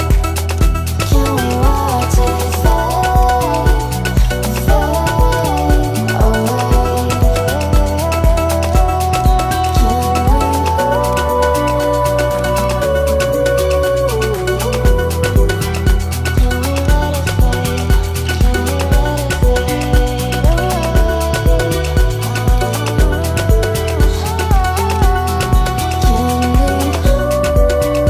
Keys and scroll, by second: 23.6 ctrl+z.